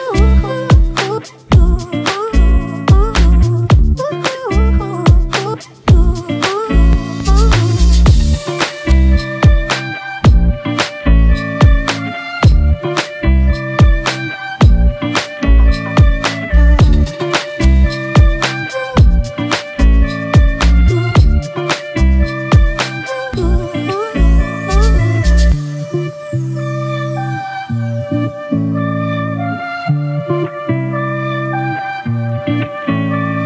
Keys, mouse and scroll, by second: 2.3 Return, 2.6 Down, 2.8 Down, 3.0-4.7 Down, 5.1 Down, 6.5 double click, 10.7 End, 12.0 Delete.